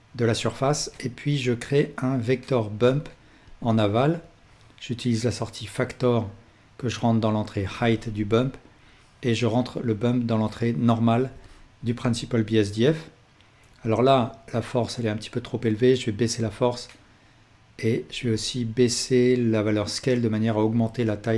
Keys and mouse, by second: 0.7 shift+a, 4.2-14.2 drag.